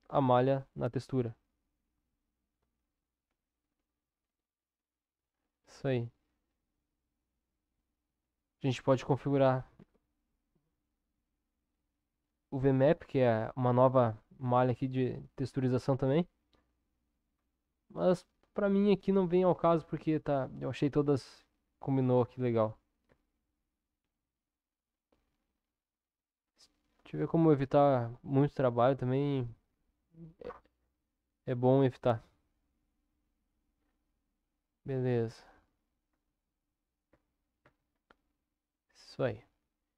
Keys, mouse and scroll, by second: 2.6 middle click, 3.4-7.5 middle drag, 19.6 Tab, 23.4 ctrl+s, 32.7 click, 38.0 Tab, 39.3 Tab, 39.7 Tab.